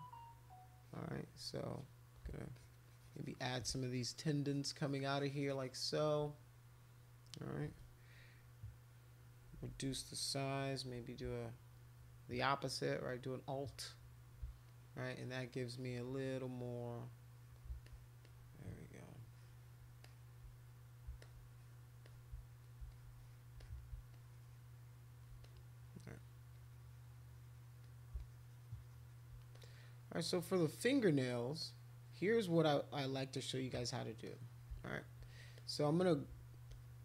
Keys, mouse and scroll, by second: 0.5 click, 0.8 click, 1.7 click, 2.5 shift+click, 2.9-4.1 shift+drag, 4.2 shift+click, 4.4-5.7 shift+drag, 9.4 [, 9.5 [, 9.9 [, 12.6-14.0 alt+drag, 14.7-17.5 shift+drag, 17.8 alt+click, 18.2-19.8 drag, 20.0 click, 21.3 alt+click, 22.0 shift+click, 22.9 alt+click, 23.6 alt+click, 24.1 shift+click, 25.5 click, 26.5 click, 27.2 click, 27.8 click, 28.2-29.2 shift+drag, 29.5-31.1 drag, 31.6-33.0 drag, 33.4 click, 34.2 click, 35.6 click, 36.7 click.